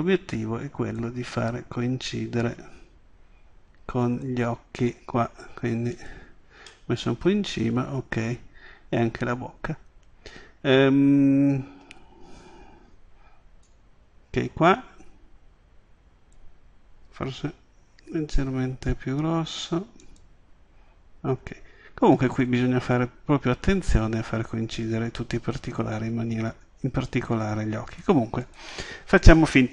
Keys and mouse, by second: 1.0-2.8 drag, 5.9 click, 6.7 middle drag, 9.3 middle click, 9.5 middle click, 13.7 click, 17.4 s, 20.2 click, 22.1 middle click, 23.3 click, 26.4 click, 28.4 click.